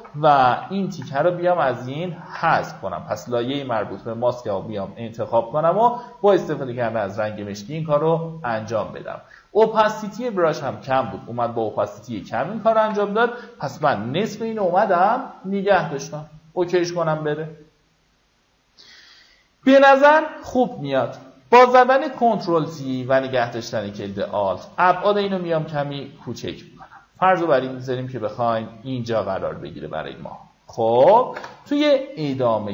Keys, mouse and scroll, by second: 0.4 alt+right click, 0.8 click, 2.5 click, 4.5 x, 4.9-7.7 drag, 10.3-12.2 drag, 12.4 ctrl+d, 13.5 v, 14.8-20.7 drag, 22.5 alt+click, 24.2-30.7 drag, 31.0 Return, 32.0-32.4 alt+scroll up 1.